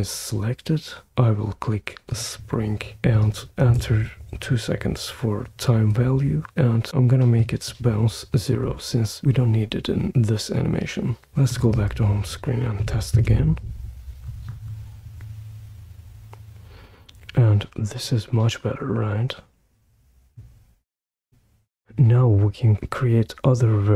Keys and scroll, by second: 3.4 2, 3.7 Return, 13.1 super+p.